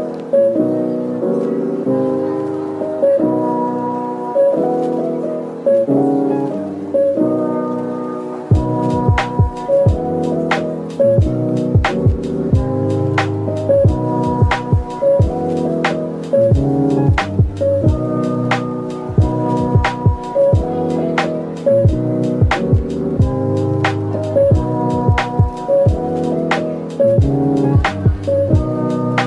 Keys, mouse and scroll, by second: 1.9 typing, 3.0-3.3 scroll, 3.7-5.6 typing, 7.5-7.9 typing, 8.9 typing, 10.2 middle click, 11.1-12.4 typing, 14.4 shift+click, 14.8-15.8 typing, 16.4 middle click, 17.3-18.3 typing, 20.3 shift+click, 20.7 middle click, 21.7 typing, 23.1 typing, 25.8-26.1 scroll down 1, 26.1 middle click.